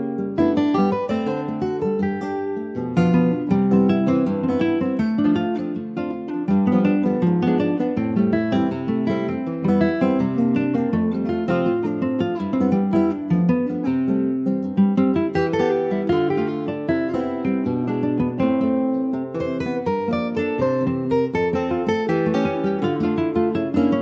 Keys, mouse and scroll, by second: 0.4 alt+shift+click, 1.7 click, 2.4 /, 3.2 click, 3.5 middle click, 4.0 scroll up 1, 4.2 ctrl+s, 4.7 middle click, 4.9-5.8 scroll up 1, 5.8 alt+shift+click, 6.1 scroll up 2, 6.9 alt+shift+click, 7.4-8.2 scroll down 2, 8.2 alt+shift+click, 8.9-10.6 middle drag, 10.6 alt+shift+click, 11.6 alt+shift+click, 12.5 alt+shift+click, 13.4 middle click, 14.1 scroll up 1, 14.3-15.5 shift+middle drag, 15.5 ctrl+b, 17.6 click, 18.1 shift+click, 18.4-19.4 middle drag, 19.4 shift+click, 19.9-23.0 middle drag, 23.0 shift+click, 23.5 shift+click.